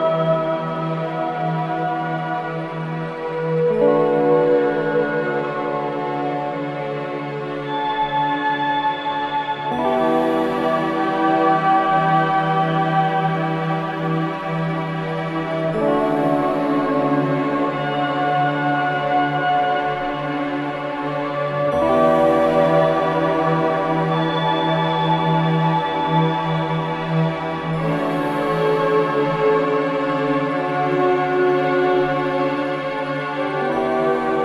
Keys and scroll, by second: 9.3 ], 11.5 ctrl+z, 17.6 3, 20.4 3, 25.9 4, 30.7 3, 31.4 ], 32.0 ].